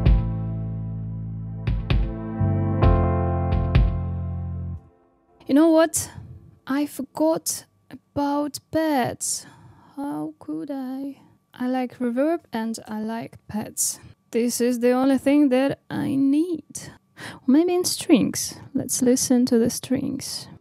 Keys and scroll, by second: 4.6 space, 10.8 super+d.